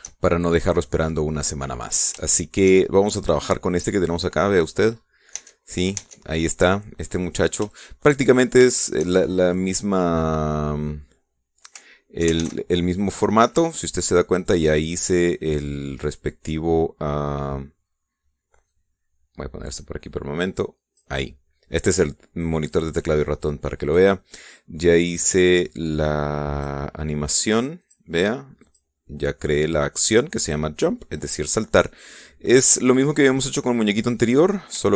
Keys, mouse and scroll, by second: 0.9-2.1 shift+middle drag, 2.5-2.9 scroll down 3, 2.9 shift+middle click, 3.5-5.4 shift+middle drag, 5.5-5.9 scroll up 2, 6.0 Tab, 7.3 scroll down 2, 7.7 scroll up 2, 8.3 shift+middle click, 9.3 shift+middle click, 13.0 alt+a, 14.1 Escape, 14.7 scroll down 2, 15.1-16.5 drag, 19.3-21.8 drag, 23.9 click, 25.6 click, 27.2 click, 28.5 click, 29.3 click, 33.7 middle click.